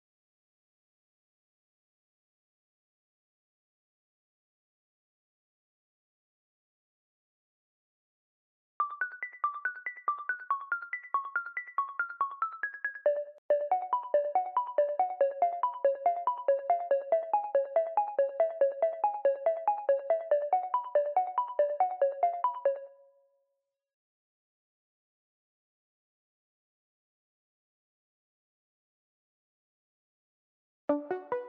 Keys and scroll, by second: 3.0 v, 4.0 v, 8.6 space, 9.4 v, 10.2 e, 12.7 alt+shift+Page_Down, 13.2-13.8 typing, 20.9 v, 21.5 y, 22.6 space, 30.5 space.